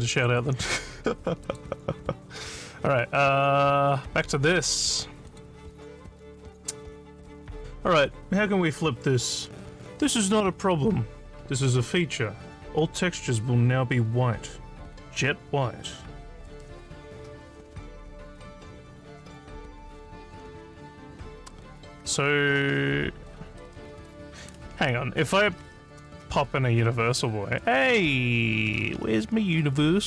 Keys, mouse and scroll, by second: 1.5 click, 5.3 click, 18.9 scroll down 2, 21.2 click.